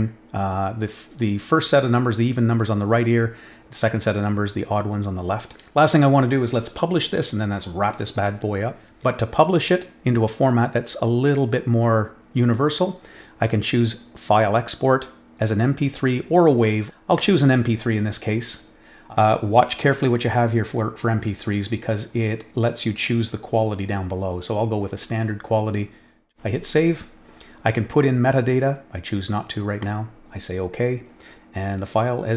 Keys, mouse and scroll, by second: 5.9 click, 9.4 click, 17.1 click, 21.6 click, 24.8 click, 26.1 click, 29.8 click, 31.6 click.